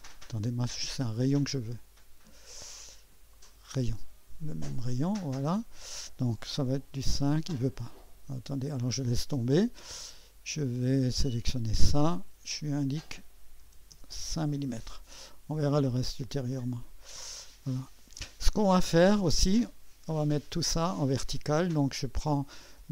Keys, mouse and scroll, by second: 0.0 Escape, 2.8 click, 3.4 click, 4.9 click, 7.0 Escape, 8.2 Escape, 9.5 click, 10.7 click, 12.1 click, 13.6 Escape, 13.9 Return, 16.5-20.7 drag.